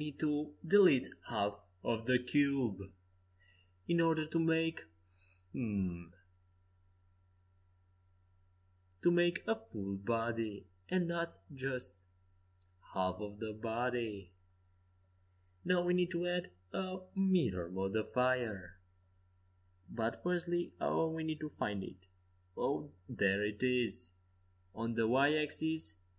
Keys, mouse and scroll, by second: 1.5 a, 2.4 c, 5.2 x, 7.6 Tab, 7.8 right click, 10.3 Tab, 11.1 Tab, 12.8 z, 14.4 Tab, 15.1 Tab, 18.3-22.0 drag, 25.4-26.1 drag.